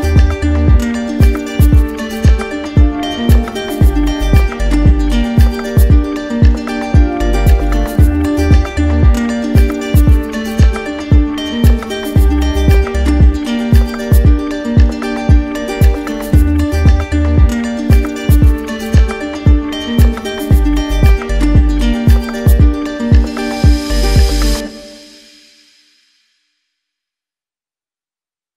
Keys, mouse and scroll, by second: 1.2 alt+right click, 2.0 alt+right click, 2.8 alt+right click, 3.7 alt+right click, 6.3 right click, 6.9 click, 7.5-8.5 drag, 15.2 click, 15.4 ctrl+z, 17.7 right click, 20.5-21.6 drag, 21.7-22.8 drag, 26.4-27.5 drag, 28.0-28.5 right drag.